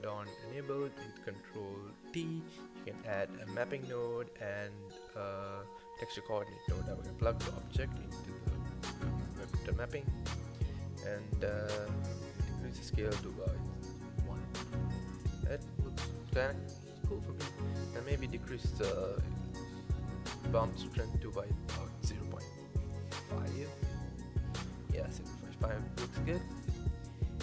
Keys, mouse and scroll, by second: 1.3 click, 1.9 ctrl+t, 4.8-6.3 middle drag, 6.3-7.9 drag, 12.1-14.0 drag, 25.7-26.3 scroll down 1, 26.3-27.1 scroll down 6, 27.1 click.